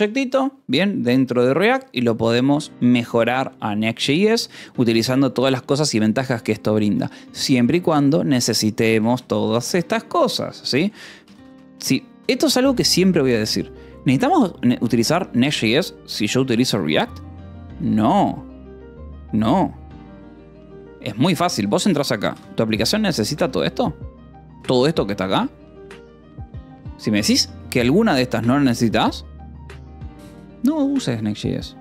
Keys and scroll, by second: 8.7 k, 9.7 Escape, 10.2-13.0 typing, 21.5-22.5 typing, 22.8 ctrl+shift+v, 22.9 Escape, 23.6 j, 27.6 Escape, 27.8 k, 31.1 j.